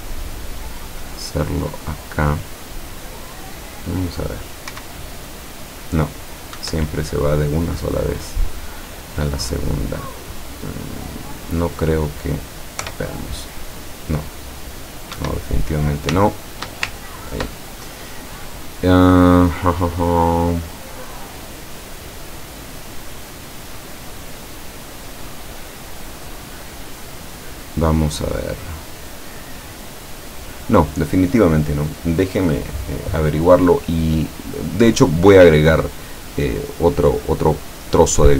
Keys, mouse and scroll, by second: 1.4-3.6 middle drag, 4.8 p, 6.6 Escape, 11.1-12.2 drag, 12.9 p, 15.2 Escape, 16.5 shift+click, 17.0-17.7 ctrl+shift+drag, 21.6-26.6 middle drag, 29.9-30.9 middle drag.